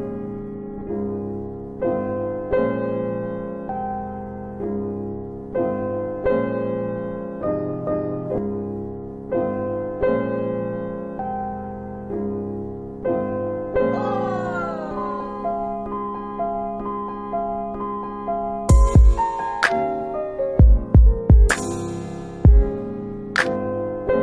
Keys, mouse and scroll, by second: 2.1 click, 7.6 click, 12.4 click, 16.7 scroll down 1, 17.0 scroll up 1, 17.9 alt+click, 18.5 alt+click.